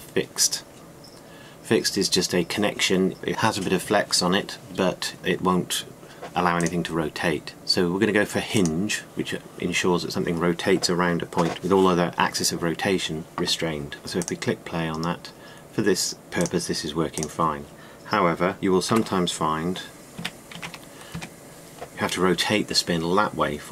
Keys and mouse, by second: 19.6 r.